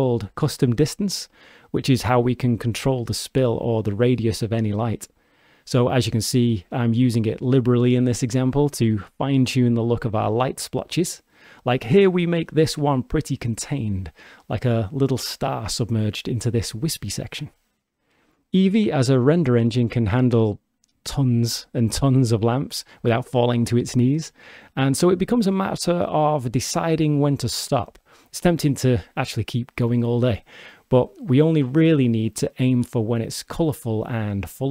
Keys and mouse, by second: 3.7 click, 4.9 click, 5.8-14.5 drag, 18.1 shift+d, 22.8 click, 26.0-28.3 drag, 28.6-31.9 drag, 34.0 shift+d.